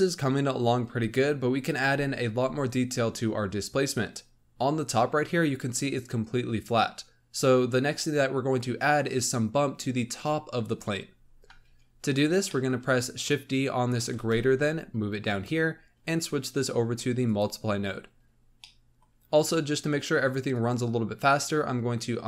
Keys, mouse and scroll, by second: 11.2-12.4 scroll up 7, 12.4-13.1 middle drag, 13.1 click, 14.1 shift+d, 16.0-18.5 drag, 18.5-20.4 middle drag, 20.4-22.2 drag.